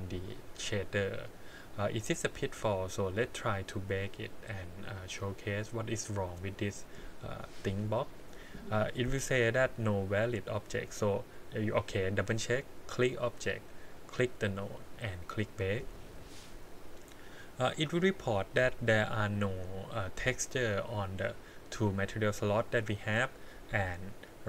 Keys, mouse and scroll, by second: 3.2-5.0 drag, 6.5 click, 12.8 click, 13.9 click, 15.5 click.